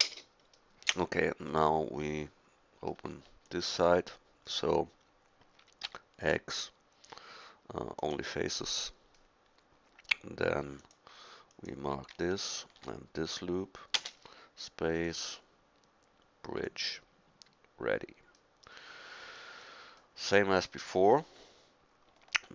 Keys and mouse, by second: 1.5 middle click, 1.9 middle click, 3.9 middle click, 5.9 x, 14.0 space.